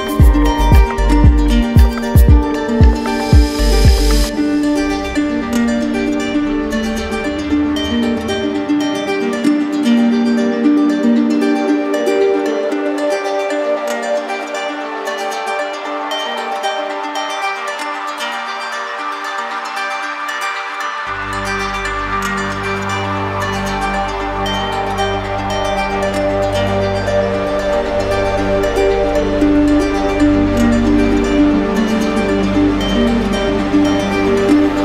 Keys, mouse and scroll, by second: 1.2 alt+click, 3.0 ctrl+click, 3.4 alt+click, 3.8 r, 7.8 click, 8.1 q, 8.6 ctrl+click, 9.2 ctrl+click, 9.3 click, 10.8 click, 11.8 click, 12.4 shift+click, 12.9 click, 16.3 click, 16.8 ctrl+d, 17.0 ctrl+d, 18.0 click, 19.5 shift+click, 20.3 click, 24.9 click, 25.6 click, 26.5 click, 28.1 click, 28.2 ctrl+z, 28.4 ctrl+z, 30.9 click, 31.8 click, 34.3-34.8 drag.